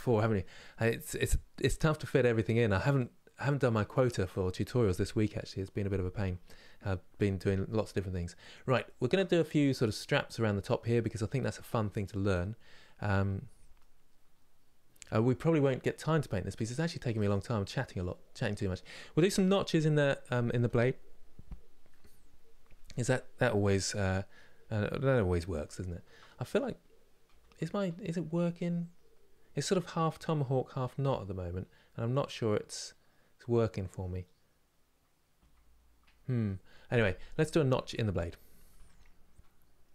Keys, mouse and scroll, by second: 8.0 scroll up 2, 8.6 shift+middle click, 9.0-9.9 scroll up 1, 9.9-10.7 scroll up 1, 10.7-16.7 middle drag, 16.7 Tab, 17.0 click, 18.2-27.0 middle drag, 27.0 KP_1, 28.4 scroll down 2, 30.3-30.9 scroll up 2, 35.1 KP_1, 38.4 Tab.